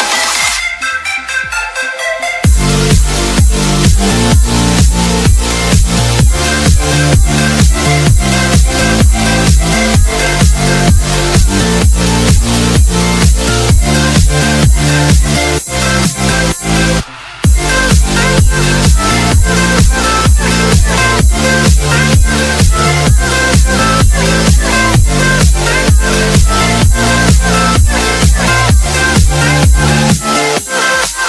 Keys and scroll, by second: 3.6 ctrl+z, 15.1 space, 15.4 F3, 15.9 Escape, 21.8 F3, 24.9 e, 26.3 shift+Page_Up, 29.1 alt+v, 29.2 alt+s.